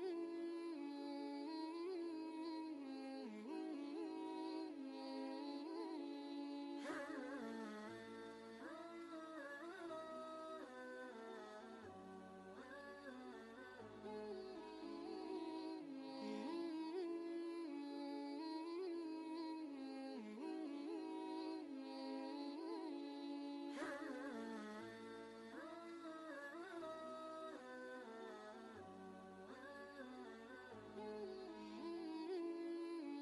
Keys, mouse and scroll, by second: 0.2-8.0 drag, 13.4 click, 14.0 ctrl+space, 14.1 ctrl+click, 14.5 ctrl+space, 18.7 click, 22.9 ctrl+alt+shift+Up, 24.8 ctrl+z, 30.8 ctrl+z, 30.9 click.